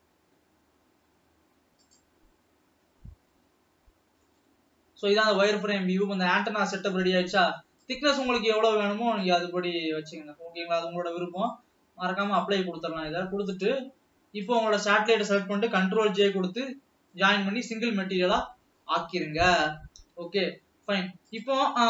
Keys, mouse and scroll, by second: 4.1-4.5 scroll up 3, 4.7-5.9 middle drag, 5.9 scroll down 2, 6.5-8.1 middle drag, 8.1-14.7 drag, 14.8 shift+click, 16.4 ctrl+j, 16.9-17.5 scroll down 2, 17.5-20.5 middle drag, 20.8 alt+a.